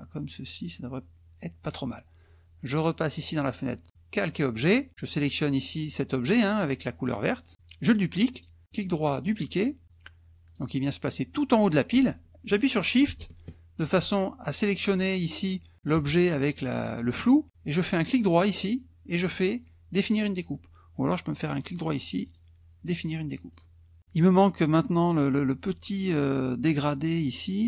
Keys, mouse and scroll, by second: 3.0 click, 7.0 click, 8.3 right click, 10.5 click, 14.0 shift+click, 18.0 right click, 21.7 right click, 23.5 click.